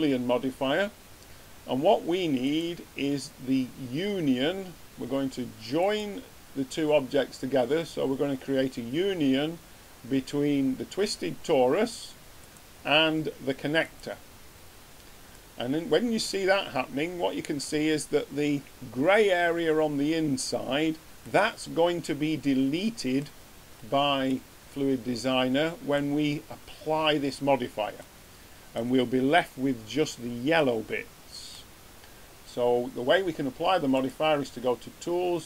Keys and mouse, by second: 2.4-4.2 drag, 12.3-14.2 drag, 15.2 middle click, 16.0-16.8 middle drag, 22.1-22.9 middle drag, 23.6-24.2 middle drag, 33.9-35.4 drag.